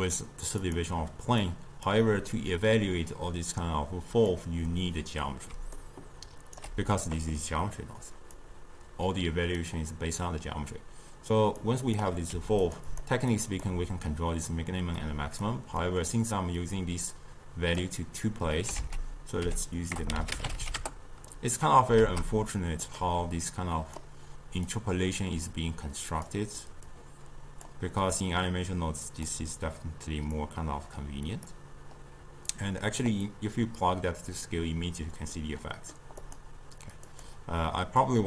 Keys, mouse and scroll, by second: 3.6-5.6 drag, 5.6 d, 5.9 right click, 6.7 d, 8.4 drag, 11.7 click, 12.4 g, 12.9 drag, 13.4 click, 15.0-15.9 drag, 15.9-16.7 middle drag, 16.7-18.8 drag, 18.8 ctrl+a, 22.0 shift+d, 23.5 click, 24.7-28.4 drag, 30.4-35.4 drag, 35.4-36.3 middle drag, 36.3 click, 37.2 click.